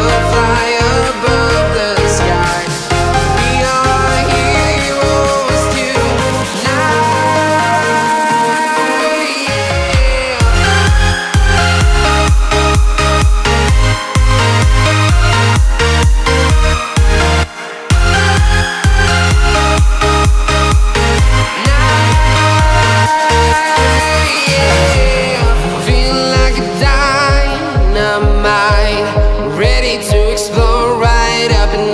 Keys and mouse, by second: 0.5-2.8 drag, 3.3 space, 4.0 space, 5.1 click, 6.0 click, 6.9 KP_Enter, 9.8 click, 11.8-13.0 drag, 13.7 click, 14.5 Tab, 15.8-17.3 drag, 17.8 g, 18.2 z, 20.7 click, 21.1 Tab, 25.2 click, 26.6-28.2 drag, 30.4 click, 31.6 shift+a.